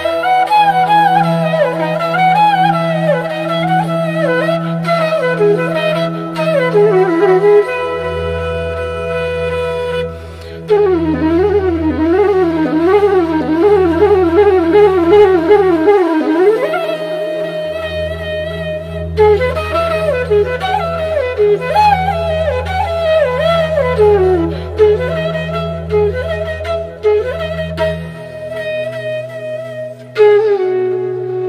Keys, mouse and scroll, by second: 0.6 alt+scroll up 1, 1.2 click, 1.6 alt+scroll down 1, 2.3-4.4 alt+drag, 4.4 click, 6.2-7.6 drag, 7.6-9.5 drag, 10.1 right click, 10.6 click, 13.5 click, 14.9-20.2 drag, 20.2-24.0 alt+drag, 24.0 ctrl+shift+[, 24.7 ctrl+], 25.8-28.0 drag, 28.0-31.2 alt+drag, 31.2 click.